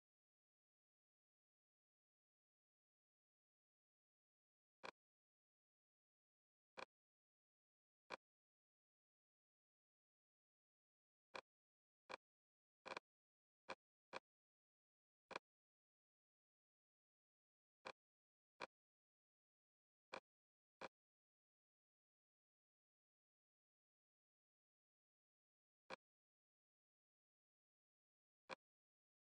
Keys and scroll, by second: 10.1 super+Tab, 15.5 Escape, 21.3 Right, 21.5 Left, 23.6 Left.